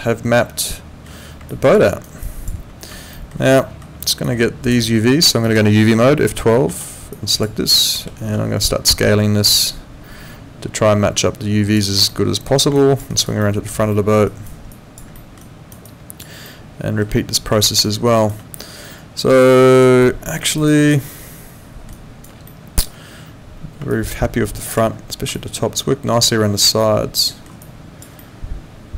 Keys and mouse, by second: 1.5 alt+click, 1.8 alt+right click, 2.2 alt+click, 3.1 alt+middle click, 3.6 alt+middle click, 4.2 click, 5.4 click, 6.7 F12, 7.1 click, 7.8 alt+click, 8.2 r, 8.9 click, 12.1 alt+middle click, 12.7 alt+click, 13.1 alt+right click, 13.4 alt+middle click, 14.3 alt+right click, 14.7 alt+click, 15.2 alt+middle click, 15.4 alt+right click, 15.8 alt+click, 16.5 alt+middle click, 17.6 alt+middle click, 17.8 alt+right click, 19.5 alt+click, 20.0 alt+middle click, 20.4 alt+right click, 20.7 alt+click, 21.1 alt+middle click, 21.9 alt+right click, 22.4 alt+middle click, 23.9 alt+click, 25.3 alt+click, 26.8 alt+middle click, 27.6 alt+click, 28.2 alt+middle click.